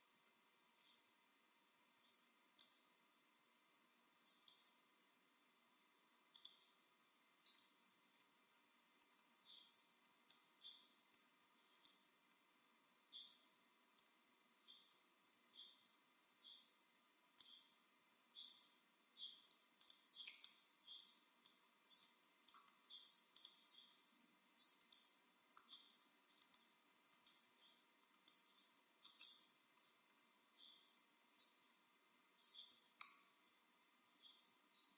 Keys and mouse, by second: 0.2 a, 2.0-4.6 b, 6.3-7.9 drag, 8.0 a, 12.8 b, 18.2 b, 20.5 middle click, 20.8 middle click, 21.0 middle click, 21.2 middle click, 23.3-25.0 drag, 24.7-29.7 right drag, 28.9-31.5 middle drag, 31.5 KP_1, 32.6 KP_7.